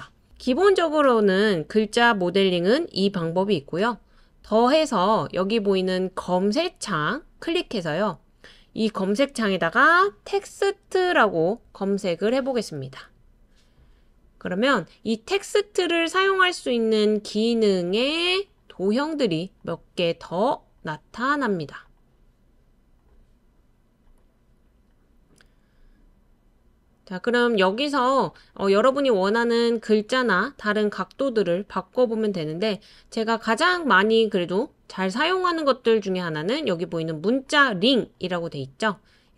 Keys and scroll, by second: 9.9-11.6 typing, 25.9-26.9 typing.